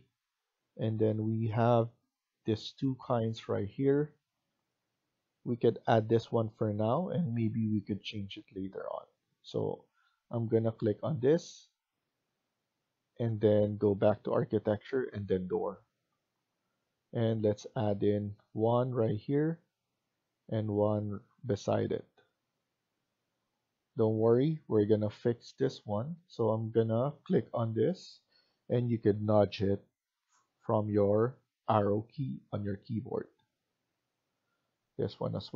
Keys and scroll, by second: 23.6 Escape, 24.6 Escape, 29.2 Left, 29.8 Left, 30.5 Left, 33.4 Escape.